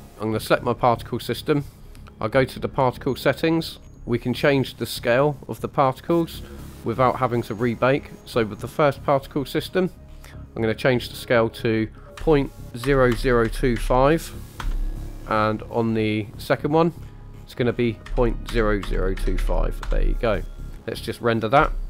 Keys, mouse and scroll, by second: 0.1 scroll up 2, 0.3 click, 2.4 click, 3.8-6.0 scroll down 8, 6.3 scroll up 2, 7.2-8.6 scroll up 4, 8.6 click, 9.2-10.4 scroll down 6, 11.4-14.6 drag, 13.1 KP_0, 15.2-16.7 scroll up 6, 16.7 click, 17.0-17.8 scroll down 7, 18.0 click, 18.8 KP_0.